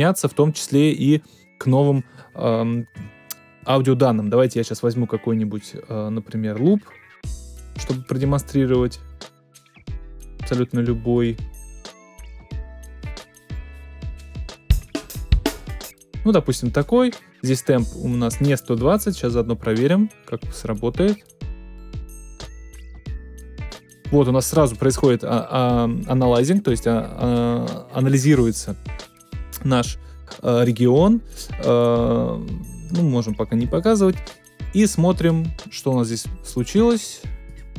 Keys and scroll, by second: 2.9 BackSpace.